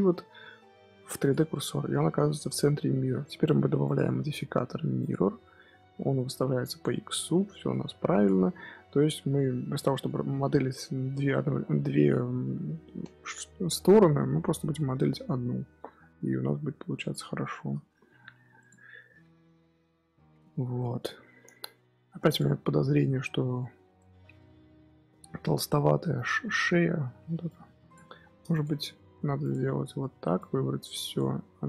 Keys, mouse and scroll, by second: 1.8 scroll up 1, 1.8 scroll down 2, 1.9-2.9 middle drag, 2.9-3.7 scroll up 1, 5.0-6.8 drag, 7.0-8.1 middle drag, 8.1 click, 8.3-9.5 middle drag, 9.5 scroll up 1, 9.7-12.8 middle drag, 13.7-16.2 scroll down 1, 16.2-16.7 scroll down 1, 17.4-18.5 scroll up 3, 17.4 shift+middle drag, 18.5 click, 19.5 KP_3, 20.2 KP_1, 20.7 scroll down 1, 20.7 scroll up 1, 22.2 click, 23.9-25.7 shift+middle drag, 25.7 Tab, 26.0 z, 27.1 1, 27.4 click, 28.0 Tab, 28.4 shift+click, 29.3 shift+click, 29.9 Tab, 30.1 1, 30.3 click, 31.4 s.